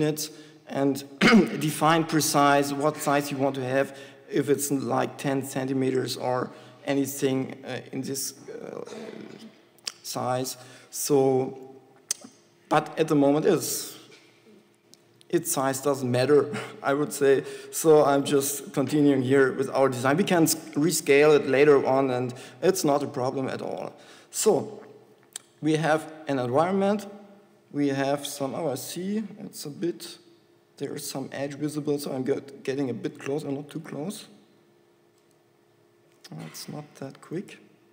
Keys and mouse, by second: 12.5 KP_5, 17.8 z, 18.7 z, 29.9 shift+f, 34.1 shift+f, 36.7 z, 37.6 shift+f.